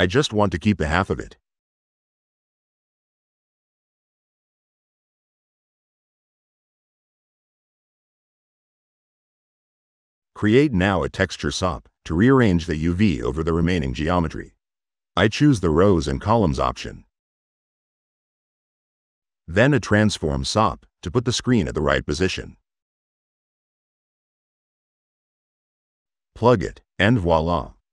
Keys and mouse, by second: 2.3-3.4 middle drag, 3.6-5.7 middle drag, 6.9 click, 9.4 right click, 10.3-11.6 typing, 12.6 click, 13.2 click, 14.4 click, 15.6 click, 16.2 middle click, 16.6 middle click, 17.5 right click, 20.8 click, 22.2 click, 23.1 click, 23.5 click, 23.5 1, 23.8 click, 24.6 click, 25.4 click, 25.8-26.9 drag.